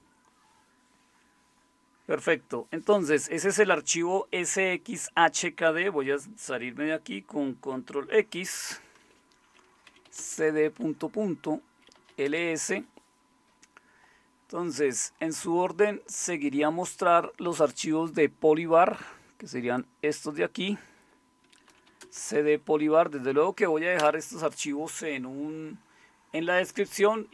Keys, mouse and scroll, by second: 8.3 ctrl+x, 9.6-12.4 typing, 21.4-23.2 typing, 24.0 Return.